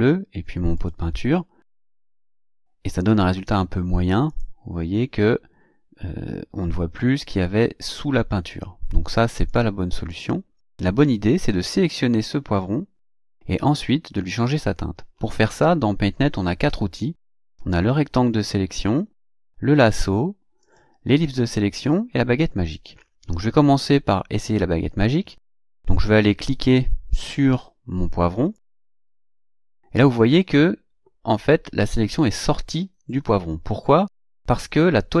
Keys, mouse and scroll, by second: 0.8 click, 1.9 click, 4.3 click, 9.4 click, 10.1 click, 17.2 click, 19.2 click, 20.6 click, 21.8 click, 28.5 click.